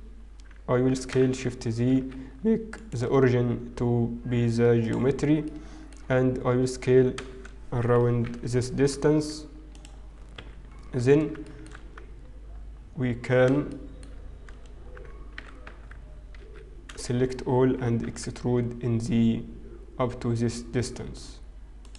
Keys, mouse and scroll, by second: 0.3-0.9 scroll up 1, 0.9 s, 2.7 right click, 5.9 middle click, 5.9-6.9 scroll down 3, 6.9-7.5 scroll up 7, 7.5 s, 10.3 KP_1, 10.9-11.5 scroll down 5, 11.5 shift+middle click, 11.5-13.6 scroll down 4, 13.7 shift+Tab, 13.7 shift+middle click, 15.9 e, 15.9 z, 19.0 a, 19.0 e.